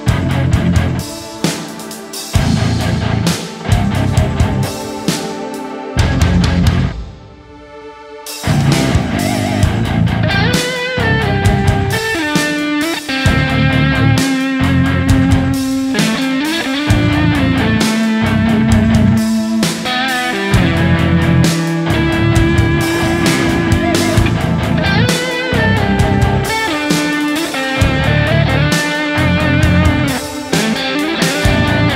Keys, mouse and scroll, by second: 8.3-8.8 scroll down 1, 18.2-19.0 scroll down 1, 19.0-19.5 scroll up 1, 20.4-21.5 scroll down 1, 21.5 double click, 22.5 alt+click, 22.8 right click, 23.1 alt+click, 23.3 e, 24.3 right click, 29.9 s, 30.3 right click, 31.6 ctrl+shift+click.